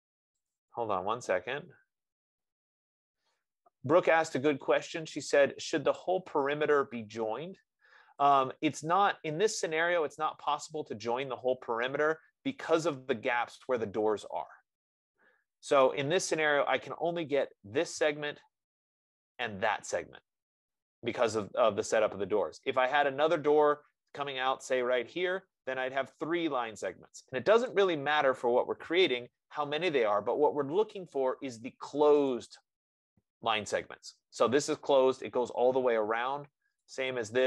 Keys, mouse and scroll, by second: 11.2 right click, 11.4 scroll, 12.2-12.7 scroll, 17.8 click, 19.7 click, 28.1 click, 30.1 click, 37.2 click.